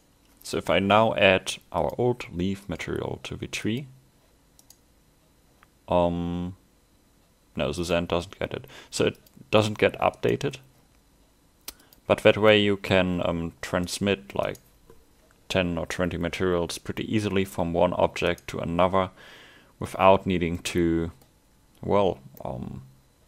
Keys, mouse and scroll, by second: 2.7 click, 4.7 right click, 7.8 click, 10.2 right click, 11.8 click, 12.5 middle click, 13.9 right click, 18.3 right click, 20.3 scroll down 1, 20.6 middle click, 22.4 middle click, 22.4 scroll up 1.